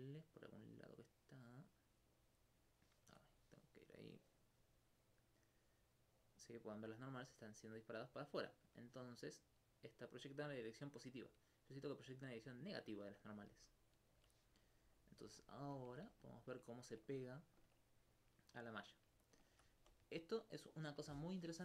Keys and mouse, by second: 3.1 Tab, 3.8 middle click, 5.4-9.3 drag, 13.5 alt+click, 15.0 click, 15.4 alt+click, 15.9 alt+click, 16.2 alt+click, 16.4 alt+click, 17.4 alt+click, 21.2-21.6 middle drag.